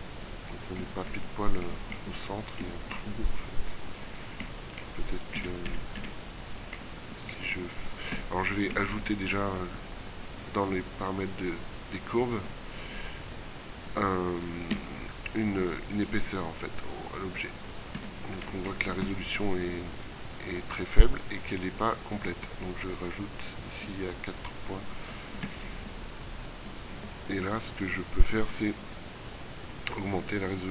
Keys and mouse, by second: 2.4 middle click, 3.9 right click, 5.4 a, 5.8 a, 6.2 a, 7.5 middle click, 8.2 Tab, 18.0 z, 19.1 z, 23.2-25.0 middle drag, 25.1 middle click, 25.5 z.